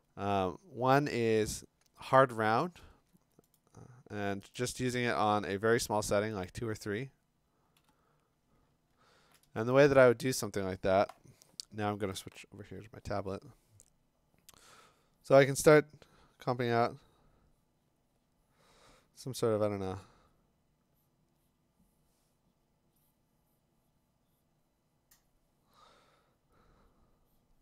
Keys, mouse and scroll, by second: 2.3 F5, 3.6 right click, 4.6 click, 6.5 click, 7.8 ], 8.7-9.3 scroll, 10.4 click.